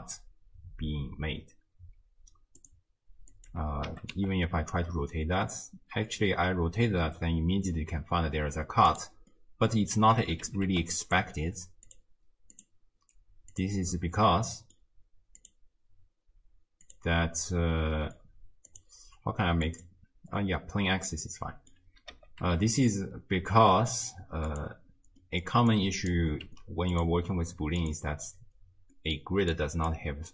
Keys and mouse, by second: 2.6 click, 3.9 r, 9.5 middle click, 10.5 r, 11.9 click, 12.7-13.7 drag, 14.4 middle click, 15.4-17.0 drag, 17.7 middle click, 18.8-20.0 drag, 20.5-21.8 middle drag, 22.1 r, 25.2 middle drag, 25.8-26.2 drag, 26.5 g, 27.8 click, 29.0 middle click, 29.6-29.9 drag.